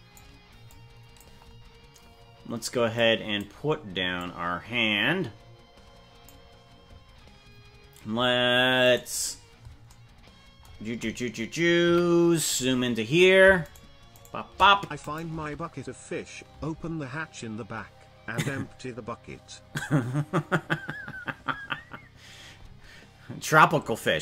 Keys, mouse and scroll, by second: 0.7 click, 2.9 click, 4.1-6.3 drag, 9.1 right click, 11.9 KP_Decimal, 12.3-12.9 scroll down 10, 13.7 shift+right click, 14.3 shift+right click, 15.0 click, 15.3 space, 16.7 space.